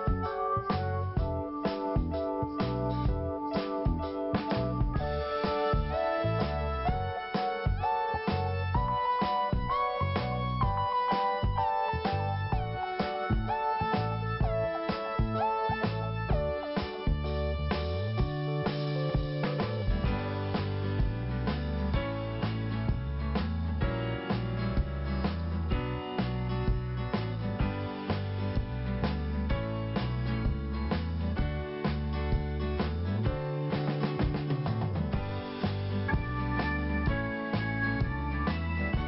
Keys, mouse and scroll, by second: 0.8 click, 1.9 scroll up 1, 3.3 scroll down 1, 4.0 scroll up 1, 4.9 click, 6.2 click, 8.1 click, 9.1 click, 10.5 click, 11.7 scroll down 1, 12.4 click, 13.6 click, 17.3 click, 18.6 click, 20.2 click, 22.1 click, 23.9 click, 24.9 click, 27.9 click, 28.9 click, 30.7 click, 31.6 click, 32.7 click, 34.9 click, 36.1 click, 38.2 click.